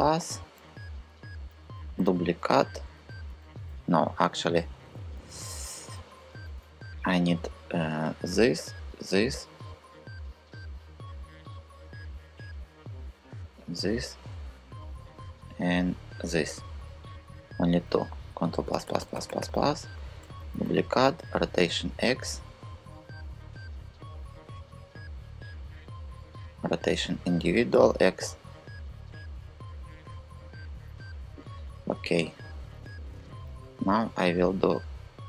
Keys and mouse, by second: 1.3 shift+d, 1.6 Return, 3.3 super+z, 4.0 super+z, 4.6 super+z, 4.9 super+z, 5.1 super+z, 5.2 super+z, 5.3 super+z, 5.5 super+z, 6.1 super+z, 7.7 click, 8.6 shift+click, 13.3 shift+click, 17.9 ctrl+KP_Add, 18.1 ctrl+KP_Add, 18.3 ctrl+KP_Add, 18.4 ctrl+KP_Add, 18.6 ctrl+KP_Add, 18.7 ctrl+KP_Add, 18.8 ctrl+KP_Add, 19.0 ctrl+KP_Add, 19.1 ctrl+KP_Add, 19.9 shift+d, 20.2 Return, 20.8 r, 21.2 x, 25.2-26.4 drag, 26.9 r, 27.4 x, 30.7-31.7 drag.